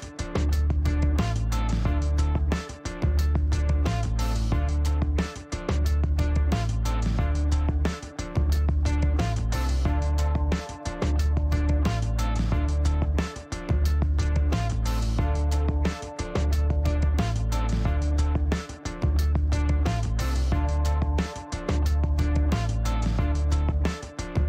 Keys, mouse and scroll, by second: 2.3 click, 3.9 click, 5.1 click, 7.2 middle click, 7.8 shift+right click, 13.3 click, 14.6 click, 15.2 middle click, 15.6 shift+scroll down 1, 16.3 shift+middle click, 16.7 shift+right click, 18.4 shift+middle click, 18.7 shift+right click, 20.3-20.7 shift+scroll up 2, 20.7 middle click, 21.4 shift+right click, 22.8 shift+right click.